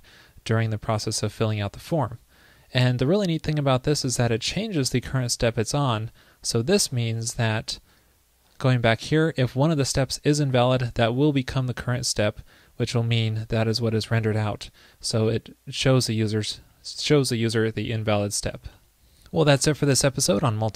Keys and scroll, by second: 18.8 super+s.